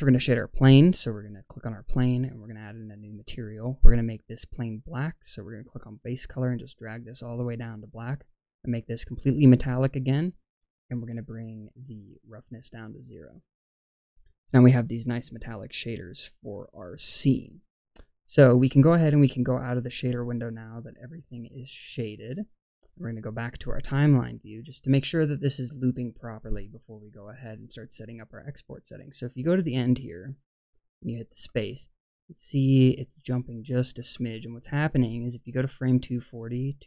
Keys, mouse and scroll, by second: 1.4 click, 2.5 click, 4.0 click, 8.2-9.2 drag, 12.3 click, 21.7-24.5 drag, 26.4-30.7 drag, 31.3 space, 32.9 click, 34.0 space, 34.3-36.8 drag.